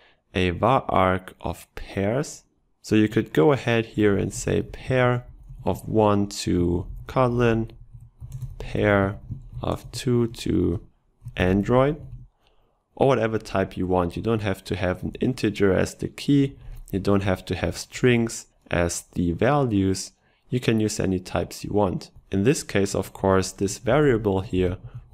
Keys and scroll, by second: 17.2 ctrl+shift+Right.